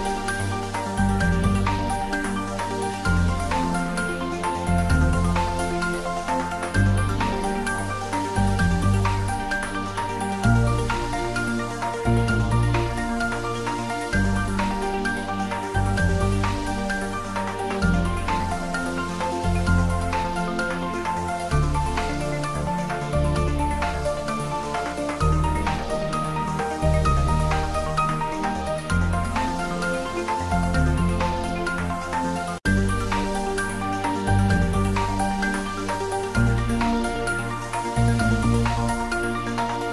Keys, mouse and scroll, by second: 0.2-2.0 drag, 2.0-2.7 scroll down 1, 2.7-4.5 middle drag, 4.5 click, 4.7 right click, 5.2 click, 6.6 typing, 9.0 u, 11.8 click, 12.1 scroll up 1, 12.8 middle click, 13.5 click, 14.2-14.8 scroll down 1, 14.8 click, 16.3 click, 18.0 click, 19.9-20.7 scroll up 1, 20.8-22.2 middle drag, 22.2-24.2 drag, 24.2-26.1 drag, 26.1-31.5 drag, 34.3 click, 39.1 click.